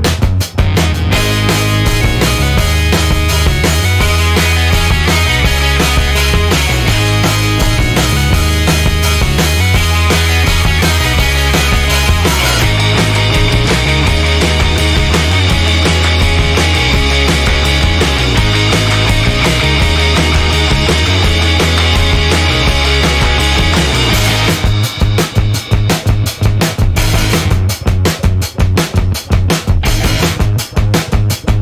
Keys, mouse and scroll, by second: 1.5 middle click, 3.0-5.5 drag, 5.7-6.3 scroll down 1, 6.6-8.0 drag, 8.2 1, 9.2-9.6 scroll down 2, 10.3-11.3 scroll up 2, 11.6-12.0 scroll down 2, 12.7 scroll up 2, 13.5-14.0 scroll down 2, 14.9 scroll up 2, 15.6 scroll down 2, 17.0-17.5 scroll up 2, 17.6-18.1 scroll up 4, 21.7-22.5 scroll down 4, 24.1 0, 25.2-26.3 scroll up 4.